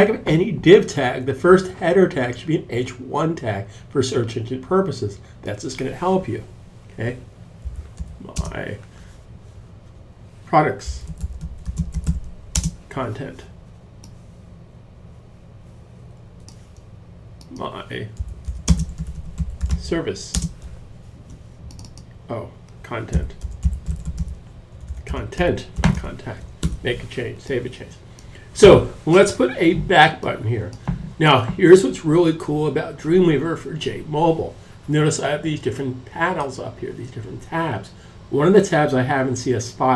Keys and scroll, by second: 6.7-7.7 typing, 9.6-12.0 typing, 17.2-20.5 typing, 22.1-26.5 typing.